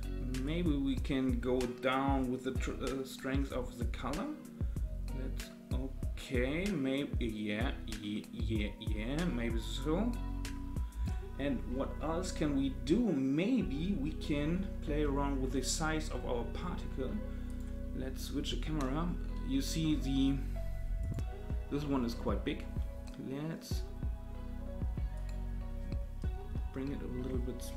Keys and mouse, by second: 0.4-11.0 drag, 15.5-16.0 middle drag, 17.5 click, 19.6 middle click, 21.0 click, 22.7 s, 26.4 KP_0.